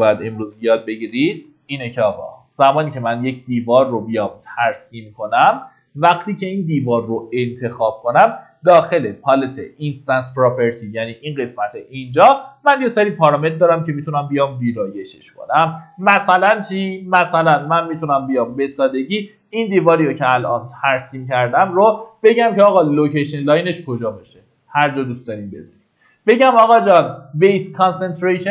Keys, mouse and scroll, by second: 0.2 Delete, 0.9 middle click, 1.0-2.0 typing, 2.4 scroll up 1, 3.1 click, 4.7 Escape, 5.5-5.9 scroll up 1, 7.2 click, 9.6 ctrl+shift+d, 13.0-15.3 drag, 15.3 middle click, 18.0 click.